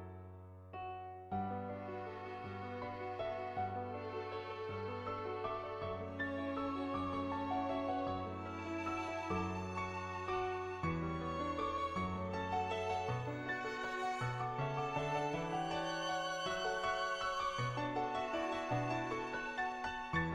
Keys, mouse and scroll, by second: 0.1 ctrl+z, 3.4-5.4 drag, 6.5 click, 7.4 click, 8.8 click, 9.8 [, 9.9 [, 10.0 click, 11.4 ], 11.8 ], 11.9 ], 12.1 click, 13.0 click, 13.8 ctrl+z, 13.8 [, 14.0 [, 14.9 ], 15.0 ], 17.4 ], 17.6 click, 18.8 [, 19.0 [, 19.2 click.